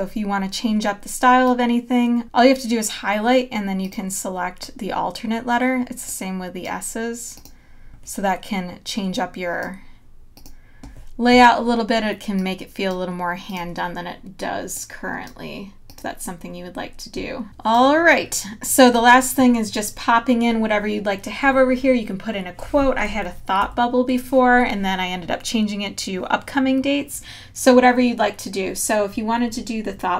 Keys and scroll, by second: 17.4 space, 23.6 super+-.